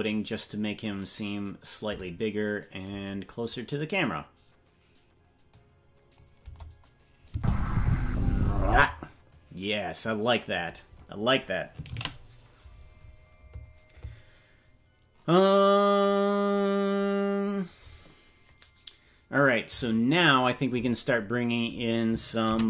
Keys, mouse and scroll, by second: 5.5 click, 6.4 KP_0, 7.3 space, 10.6 space.